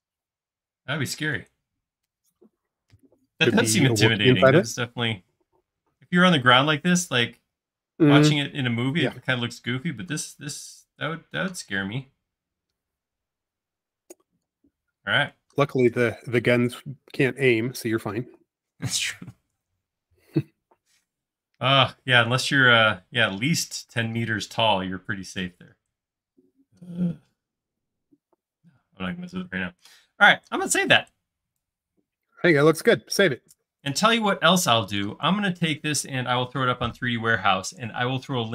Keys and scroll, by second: 1.1 typing.